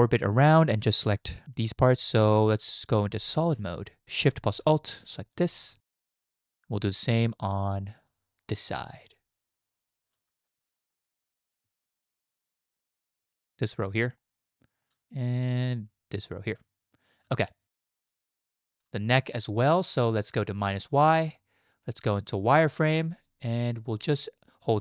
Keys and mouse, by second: 3.1 z, 5.3 alt+shift+click, 5.8 shift+click, 6.5 click, 8.0 click, 8.7 shift+click, 10.4 alt+shift+click, 11.3 click, 12.7 shift+click, 14.2 shift+click, 17.5 shift+middle click, 18.4 shift+middle click, 20.6 middle click, 21.3-21.8 shift+middle drag, 22.3 z.